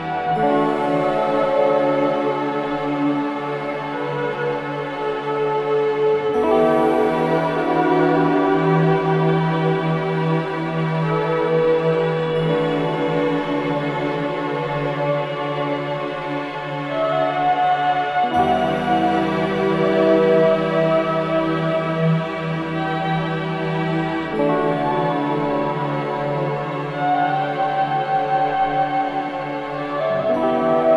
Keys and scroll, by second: 2.3 ctrl+shift+z, 5.2 ctrl+space, 6.5 a, 11.6 space, 12.1 v, 15.7 ctrl+space, 21.9 a, 29.0 ctrl+space, 29.7 v, 30.5 ctrl+KP_0.